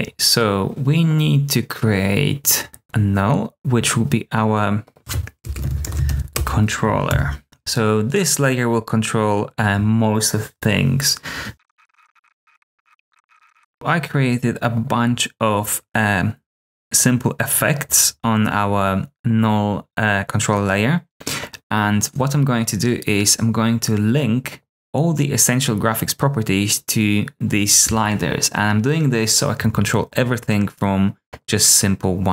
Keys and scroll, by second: 5.3-6.5 typing, 7.0 shift+super+[, 11.3-14.0 typing, 12.7 super+d.